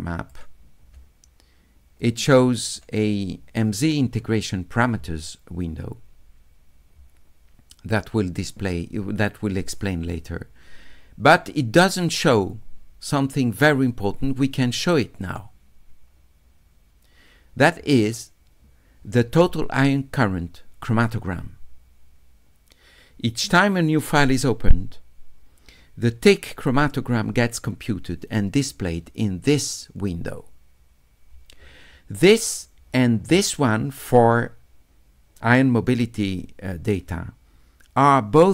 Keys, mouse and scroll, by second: 2.0 click, 11.9 click, 15.2 click.